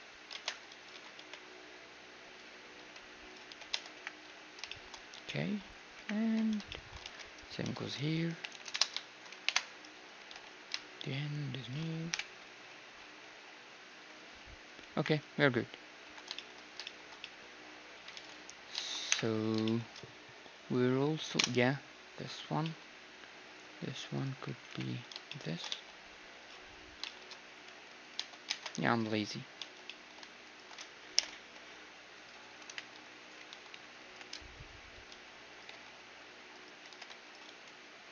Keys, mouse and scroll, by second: 0.4 ctrl+Tab, 1.0 a, 1.3 b, 2.8-6.3 typing, 3.8 Tab, 4.5-7.5 middle drag, 7.1 alt+d, 7.6 r, 9.5 KP_Decimal, 10.3 g, 12.1 KP_7, 12.5 z, 12.7-15.1 middle drag, 13.3 z, 14.6 z, 15.0 KP_1, 16.1 a, 16.4-19.1 middle drag, 18.2 ctrl+s, 19.1 KP_1, 19.7-21.6 middle drag, 21.4 KP_Enter, 22.6-24.6 middle drag, 24.2-25.3 right drag, 24.7 KP_3, 25.3-30.5 middle drag, 25.3 z, 25.5 right click, 25.5 shift+d, 27.7 g, 28.2 Tab, 29.6 z, 30.5-32.1 drag, 30.5-32.3 right drag, 31.2 ctrl+i, 31.4 x, 32.7-35.7 typing, 34.8-36.9 middle drag, 36.9-38.1 typing.